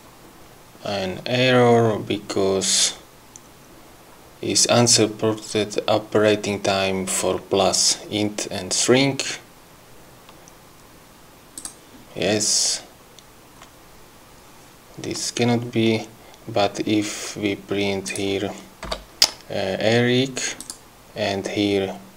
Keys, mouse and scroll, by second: 11.8 click, 18.3 click, 19.1 2, 20.8 click.